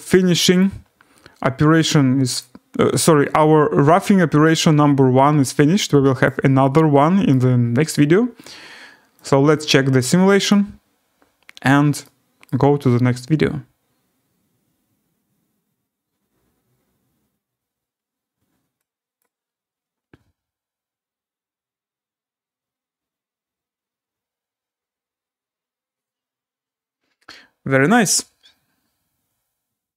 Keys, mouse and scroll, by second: 0.6 click, 2.4 click, 6.2 click, 7.3 right click, 10.5 click, 11.0 scroll down 4, 11.3-11.7 scroll, 12.4 right click, 19.2 click, 29.3 alt+w.